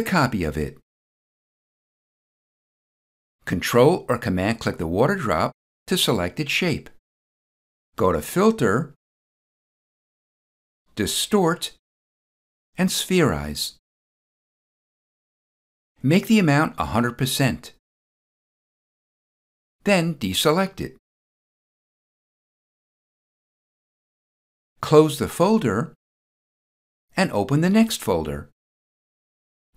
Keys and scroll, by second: 19.9 ctrl+d.